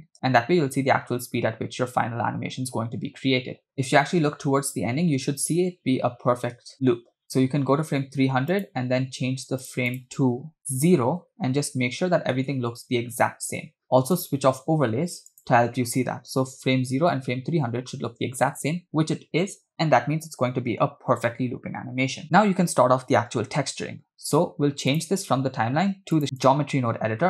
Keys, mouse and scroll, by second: 0.0 click, 0.2 space, 6.6 space, 7.4 click, 8.5-9.8 drag, 9.9-12.4 drag, 14.1 click, 15.3-17.3 drag, 16.9 0, 22.2 space, 24.9-26.5 drag.